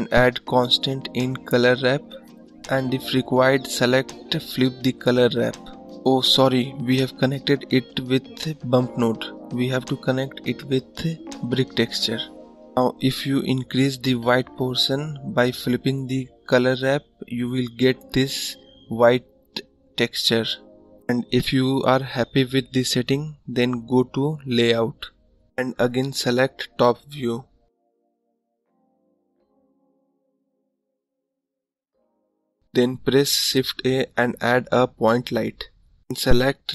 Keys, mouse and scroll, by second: 0.6-6.1 drag, 7.4-10.2 middle drag, 10.2 click, 11.2-12.2 middle drag, 12.2 scroll down 1, 12.3-15.3 middle drag, 15.3-16.4 drag, 17.5-19.1 drag, 20.2-20.9 scroll down 7, 23.3 click, 25.4 click, 26.5 click, 27.6 `, 28.2-29.4 scroll up 8, 29.8-30.6 scroll down 5, 30.7-31.3 scroll down 1.